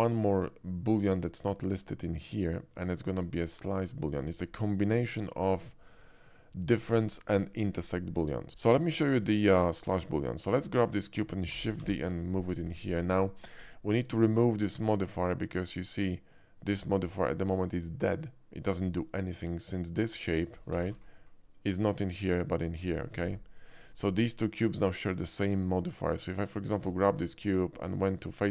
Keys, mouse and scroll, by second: 2.7 click, 3.4 shift+middle drag, 8.5 shift+x, 8.6 middle click, 8.9 middle click, 9.6 middle drag, 10.2 shift+click, 10.6 shift+middle drag, 11.5 shift+d, 11.7 y, 11.8 shift+d, 12.5 click, 12.9 middle drag, 19.8 click, 20.8 g, 20.9 y, 22.7 right click, 24.5 click, 25.2 click, 26.5 click, 26.9 Tab.